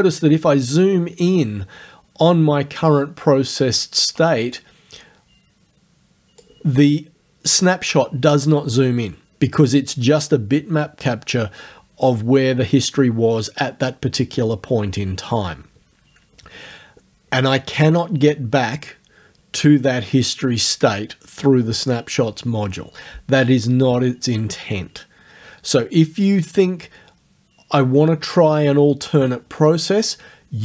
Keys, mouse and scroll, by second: 4.6-6.6 drag.